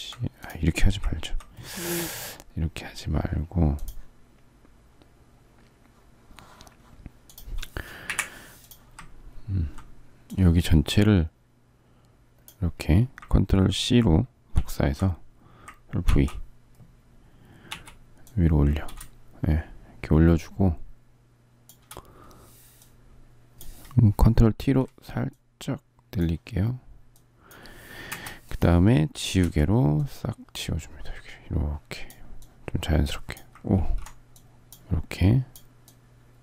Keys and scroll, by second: 7.8 Delete, 14.3 ctrl+c, 15.8 ctrl+v, 17.4 v, 24.3 ctrl+t, 27.8 Return, 29.1 e, 33.4 ctrl+z.